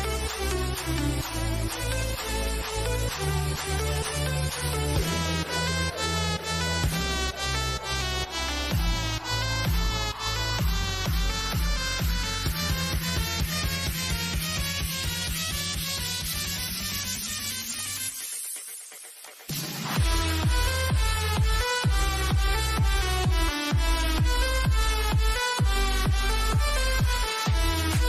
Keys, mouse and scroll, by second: 3.9 click, 4.4 scroll down 1, 5.0 shift+middle click, 5.9-6.4 scroll up 1, 7.5 click, 13.2 click, 15.5-24.9 drag, 24.9 Return, 27.6 click.